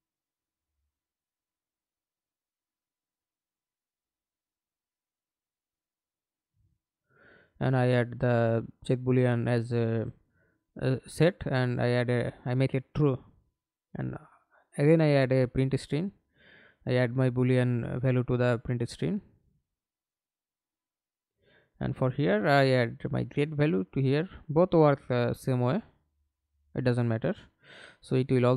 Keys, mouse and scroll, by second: 1.1 Return, 2.1 right click, 3.7 right click, 5.9 double click, 8.8 right click, 9.8 right click, 11.1 ctrl+c, 11.3 ctrl+right click, 12.6 ctrl+v, 20.3 right click, 22.1 double click, 23.6 double click.